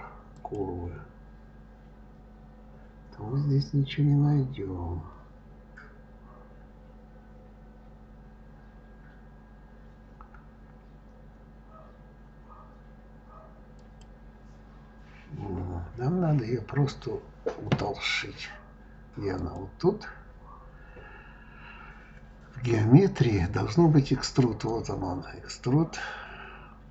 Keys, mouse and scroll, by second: 13.8 click, 19.3 click, 22.6-26.9 drag.